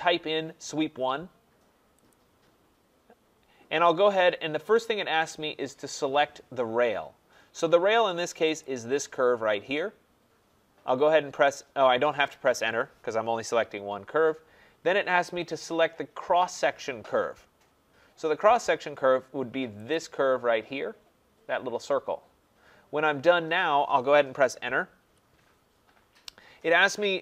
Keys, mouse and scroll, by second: 8.6-13.8 drag, 19.9-25.0 drag, 25.0 Return.